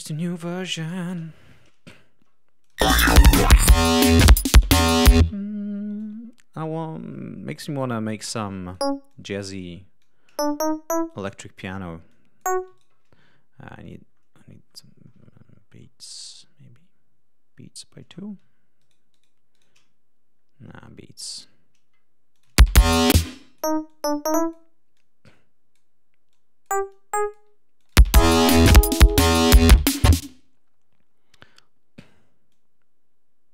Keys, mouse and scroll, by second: 0.8 BackSpace, 0.8 5, 1.0 Return, 2.5 click, 2.7 space, 3.6 ctrl+scroll up 2, 4.4 d, 4.7 click, 5.1 space, 5.9-7.6 drag, 8.4 click, 9.0 click, 9.9-11.4 drag, 12.0 click, 12.7 shift+right click, 13.6 scroll down 2, 14.0-14.4 scroll up 2, 14.4-14.8 scroll down 2, 15.0-15.3 scroll down 2, 15.5-16.1 scroll down 4, 17.5 scroll up 2, 18.7 shift+right click, 19.4 shift+right click, 20.3 scroll down 2, 22.2 click, 22.4 space, 23.0 ctrl+space, 23.3 ctrl+click, 23.8 ctrl+click, 24.8-25.9 drag, 26.2 click, 26.8 click, 27.7 click, 27.9 space, 30.1 space, 32.4-33.5 drag.